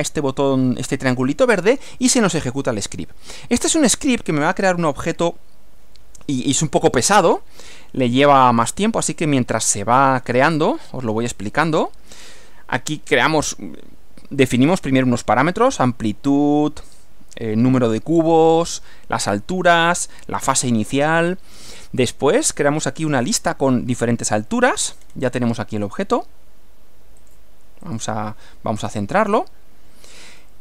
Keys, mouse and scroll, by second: 3.7 click, 25.0-25.5 scroll down 2, 27.2 click, 27.9 click, 28.8 scroll down 1, 29.4 middle click, 30.4-30.6 scroll up 1.